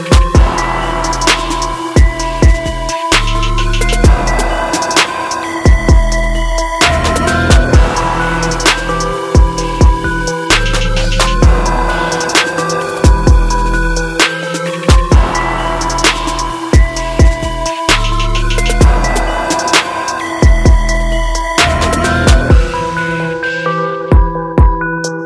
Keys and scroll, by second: 5.2 ctrl+j, 20.8 ctrl+-, 22.7 ctrl+0, 23.2 ctrl+d.